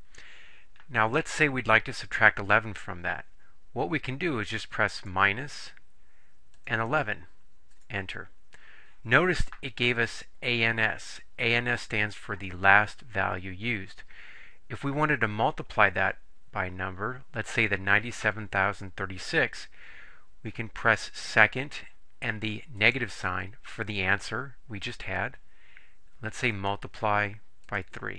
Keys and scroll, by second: 5.1 -, 6.6 1, 6.9 1, 7.8 Return, 27.7 3.